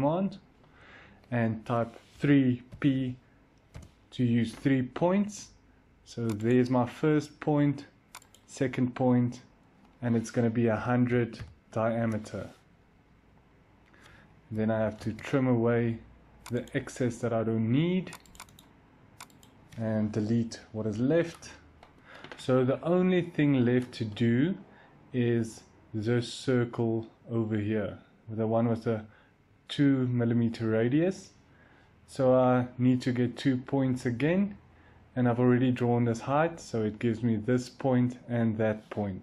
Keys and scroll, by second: 2.0-2.6 typing, 3.6 Return, 7.9-8.7 typing, 10.4-12.4 typing, 14.2-14.9 typing, 20.3 Delete.